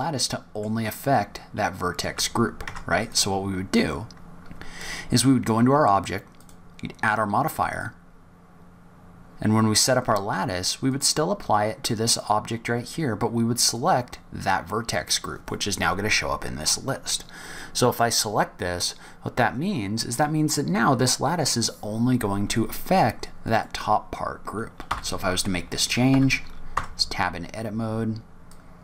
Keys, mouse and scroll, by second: 2.0 Tab, 2.5 Tab, 3.0 click, 6.3 click, 7.5 click, 10.7 click, 13.6 click, 23.4 click, 24.8 s, 26.6 Tab, 28.4 click.